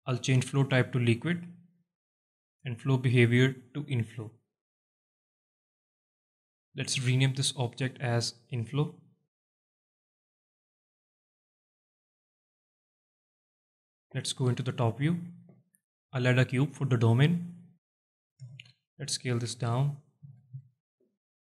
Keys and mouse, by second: 3.4-4.3 drag, 5.6 click, 6.6 alt+middle click, 7.2 alt+click, 7.4 alt+middle click, 9.3 click, 9.9 F2, 13.8-14.1 alt+drag, 14.5 KP_7, 15.5 alt+shift+click, 16.0 shift+a, 17.8 right click, 18.8 s, 19.3 click, 19.5 z, 20.3 g, 20.8 click, 21.0 alt+shift+middle click.